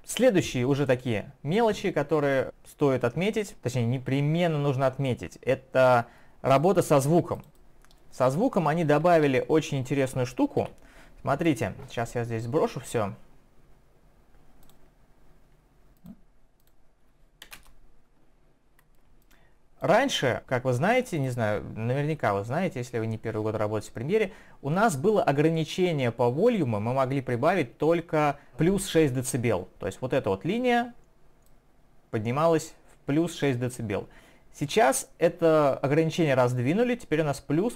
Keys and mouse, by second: 6.5 click, 7.4 click, 7.6 click, 11.6 right click, 14.6 click, 16.0 click, 16.6 click, 17.5 0, 17.6 Return, 19.2 click, 19.8 click, 21.2 click, 31.5 click.